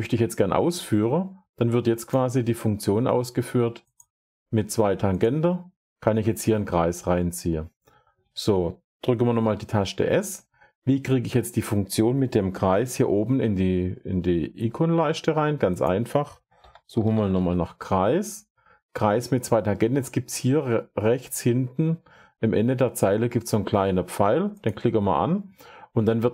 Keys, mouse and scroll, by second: 0.6 click, 2.0 click, 3.8 click, 5.2 click, 7.8 Escape, 9.2 s, 11.3 click, 12.2 click, 12.2 typing, 15.7-16.9 drag, 16.3-17.7 typing, 17.0 click, 18.7 click, 24.5 click, 24.8-26.3 drag.